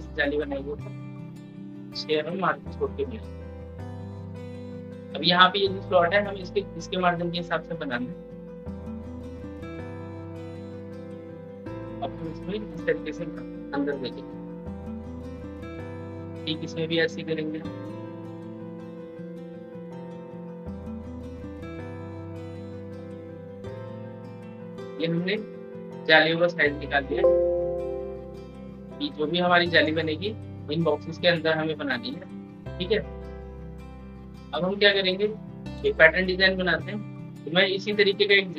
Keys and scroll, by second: 13.7 ctrl+k, 25.3 ctrl+k.